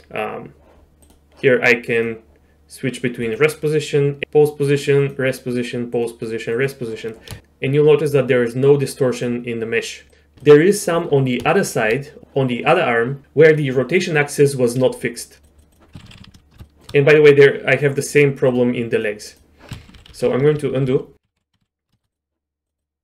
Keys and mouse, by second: 1.0 click, 3.2 click, 5.0 click, 6.0 click, 6.6 click, 9.2-10.1 drag, 10.4-10.8 shift+drag, 11.5 shift+drag, 15.0-15.9 drag, 16.0 ctrl+z, 16.6 shift+click, 20.0 ctrl+z, 20.2 ctrl+z, 20.3 ctrl+z, 20.4 ctrl+z, 20.6 ctrl+z, 20.7 ctrl+z, 21.3 ctrl+z, 21.5 ctrl+z, 21.8 ctrl+z, 21.9 shift+middle click, 22.1 click, 22.8 click.